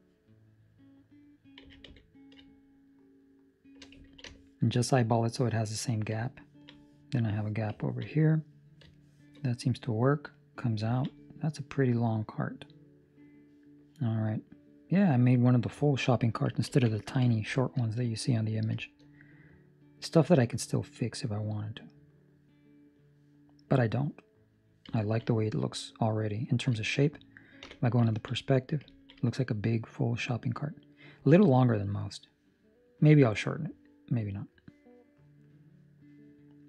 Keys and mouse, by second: 1.6 s, 4.0 ctrl+middle click, 4.2 shift+middle click, 6.3 ctrl+middle click, 7.9 ctrl+middle click, 8.6 middle click, 8.9 shift+middle click, 9.4 middle click, 10.0 middle click, 10.8 ctrl+middle click, 11.0 middle click, 15.8 ctrl+middle click, 16.6 ctrl+s, 17.2 ctrl+middle click, 17.5 shift+middle click, 17.7 middle click, 18.7 shift+middle click, 19.0 middle click, 25.0 ctrl+middle click, 25.2 middle click, 26.7 shift+middle click, 27.6 KP_5, 28.1 ctrl+middle click, 28.3 middle click, 28.8 ctrl+middle click, 29.1 middle click.